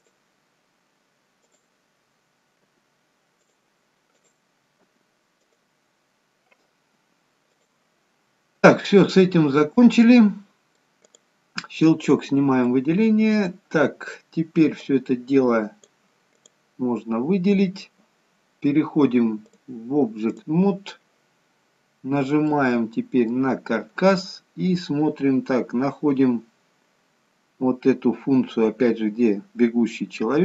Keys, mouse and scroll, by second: 1.8 click, 2.6 g, 4.1 click, 5.6 g, 8.3-9.2 scroll down 5, 9.2 middle click, 11.1 click, 12.0-12.6 scroll up 2, 12.6 middle click, 13.6-14.7 scroll down 2, 14.7 click, 16.3 click, 22.1 scroll up 2, 22.4 middle click, 27.5-29.3 scroll down 3, 29.3-29.8 scroll down 1.